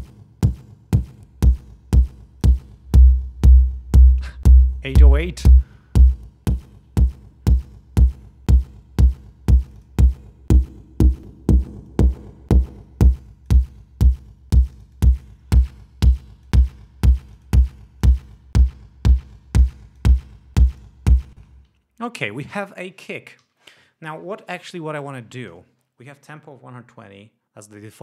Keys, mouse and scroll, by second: 1.1-2.6 drag, 2.8-3.1 scroll up 2, 5.5 scroll down 2, 5.9-6.2 scroll up 2, 6.6-7.2 scroll up 4, 7.5 scroll up 2, 9.6-11.2 drag, 11.2-11.8 scroll down 4, 11.9-13.7 drag, 14.6-15.4 drag, 15.4 scroll down 2, 15.8-16.6 drag, 17.2 click, 18.0-20.2 drag, 20.7 click, 21.3 space, 21.8 ctrl+scroll down 2, 23.4 ctrl+s.